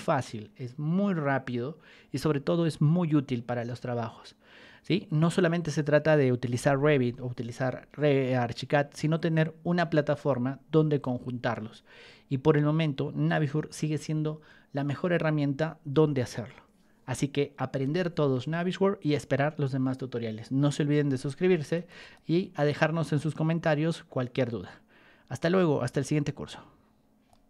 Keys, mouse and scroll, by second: 21.7 right click, 21.9 right click, 27.2 click.